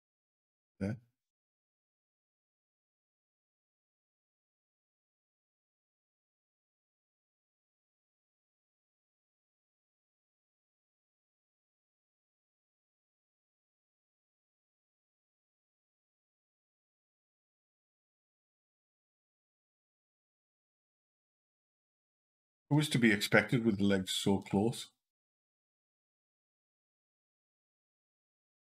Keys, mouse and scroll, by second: 3.9 click, 6.8 c, 14.5 click, 17.6 click, 19.1 click, 20.1 Up, 20.5 Up, 22.0 Down, 22.3 Down, 23.2 Down, 24.2 Up, 26.9 Up.